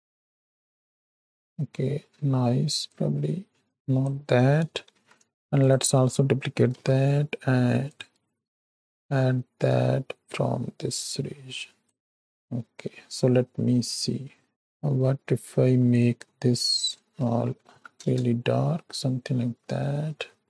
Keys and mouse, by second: 1.1 shift+click, 2.9-4.0 drag, 4.9 shift+d, 6.6 r, 8.8-11.9 drag, 12.0 middle click, 14.5 click, 15.8 click, 16.9-18.0 drag.